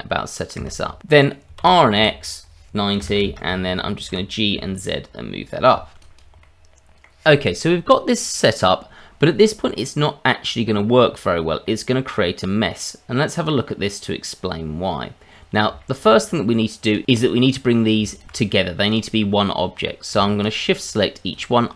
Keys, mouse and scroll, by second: 1.6 r, 4.1 g, 6.0 click, 6.4 middle click, 9.8 middle click, 11.6 middle click, 15.2-15.7 scroll up 1, 15.8 shift+middle click, 16.8 click, 17.2 click, 18.1 shift+click, 18.9 click, 20.4 shift+click, 21.3 click.